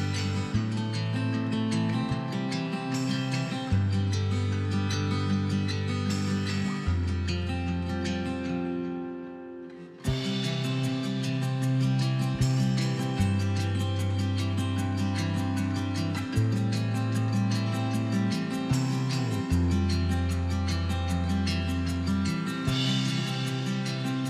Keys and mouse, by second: 0.1 l, 2.4 click, 2.6 ctrl+z, 3.0-4.9 typing, 3.5 ctrl+z, 5.2-6.3 drag, 9.8 l, 11.0-17.3 typing, 18.2 click, 18.8 click, 19.9 middle click, 20.2-22.7 typing, 23.8 click, 24.0 z, 24.2 l.